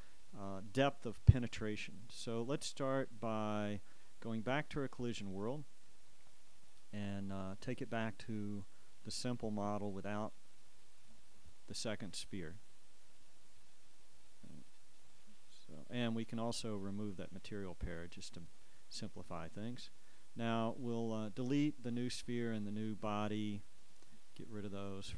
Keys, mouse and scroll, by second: 6.7-8.2 drag, 11.8-14.7 shift+right drag, 13.8-15.0 drag, 17.4 click, 18.7 click, 20.6 scroll down 1, 20.7 click, 22.1 click, 22.6 click, 23.9-25.1 right drag.